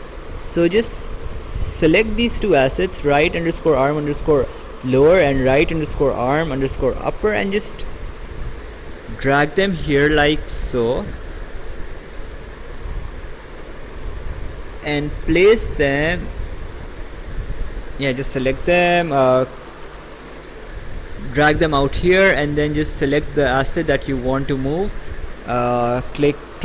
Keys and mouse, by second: 2.9 ctrl+click, 7.0 click, 17.1 click, 19.0 click.